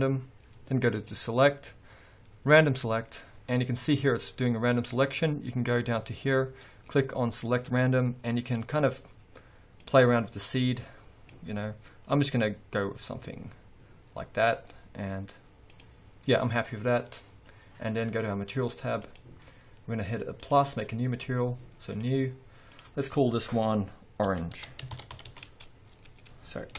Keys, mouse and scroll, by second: 1.1-5.1 drag, 3.7 scroll down 1, 4.4-4.8 scroll up 1, 7.6 click, 9.9-19.3 drag, 20.5-22.4 drag, 22.8-26.7 drag.